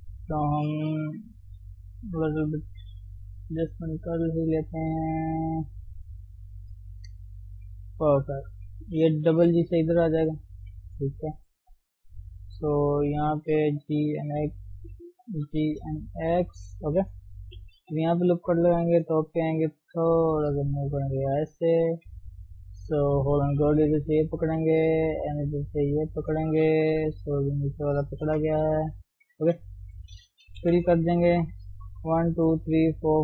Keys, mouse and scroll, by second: 0.0 click, 1.0 g, 2.3 scroll down 1, 2.5-8.4 middle drag, 8.4 click, 9.5 g, 10.7 KP_7, 11.7 scroll up 1, 12.0-15.4 middle drag, 15.4 g, 16.8-18.0 middle drag, 18.0 ctrl+r, 18.9 KP_7, 20.0 g, 21.1 scroll down 1, 21.2 middle click, 21.9 KP_3, 22.4 scroll up 1, 22.9 shift+middle click, 23.7 click, 24.5-25.8 middle drag, 25.8 shift+click, 26.2 shift+click, 27.2-28.3 middle drag, 28.3 ctrl+click, 28.7 middle click, 29.5 shift+click, 29.7 middle click, 30.6 f, 30.9-33.2 middle drag.